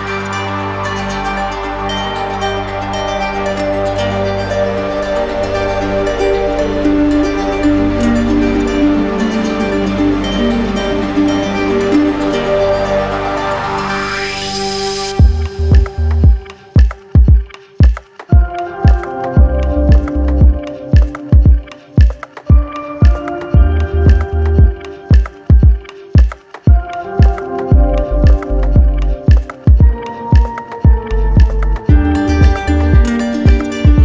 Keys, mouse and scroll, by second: 0.1 click, 5.4 click, 6.3 right click, 6.8 shift+right click, 7.6 shift+click, 9.5 z, 12.3 ctrl+click, 12.7 ctrl+click, 13.2 w, 15.7 click, 18.6 click, 19.5 ctrl+click, 21.1 ctrl+click, 21.8 ctrl+click, 22.2 ctrl+click, 25.8 click, 26.8 click, 27.1 ctrl+click, 27.9 q, 28.8 click, 29.3 ctrl+click, 30.3 ctrl+d, 31.1 ctrl+d, 31.7 ctrl+d.